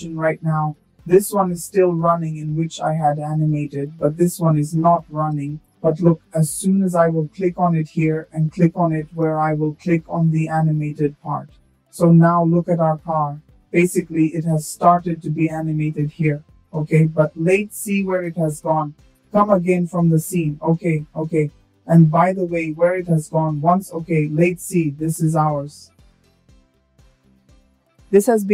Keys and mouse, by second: 4.3 click, 5.5 space, 6.5 space, 8.0 shift+middle click, 8.9 space, 10.0 space, 16.3 click, 17.4 shift+middle drag, 20.2 click, 23.6 middle click, 27.3 click.